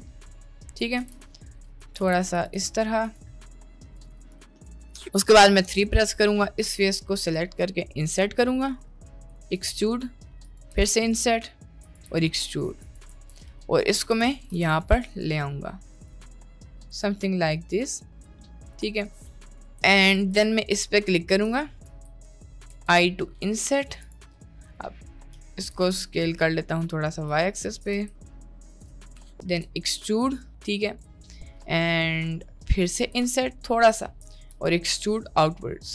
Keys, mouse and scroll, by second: 1.0 s, 2.0 s, 2.6 s, 3.4 middle click, 3.6 middle click, 3.8 middle click, 4.0 shift+s, 4.5 middle drag, 4.8 Tab, 5.8 3, 6.0 click, 7.2 i, 9.4 e, 10.7 i, 12.0 e, 13.1 Tab, 13.6 middle click, 14.0 g, 14.5 g, 16.0 click, 16.4 middle click, 17.6 middle click, 18.6 middle click, 19.2 middle click, 19.6 Tab, 19.8 Tab, 20.0 Tab, 21.0 middle click, 21.5 click, 21.8 middle click, 22.6 i, 24.3 middle click, 25.3 s, 28.0 s, 28.8 s, 29.2 middle click, 29.6 e, 31.1-32.6 middle drag, 32.9 i, 34.5 e.